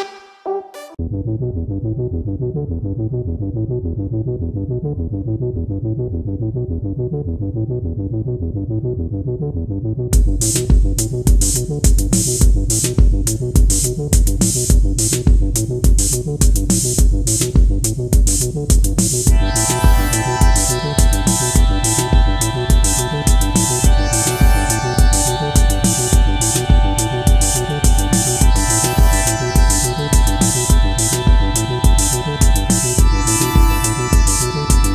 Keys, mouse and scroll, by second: 2.0-3.3 scroll up 1, 9.1 right click, 17.3 ctrl+t, 18.4 alt+shift+click, 21.8 Up, 22.0 Return.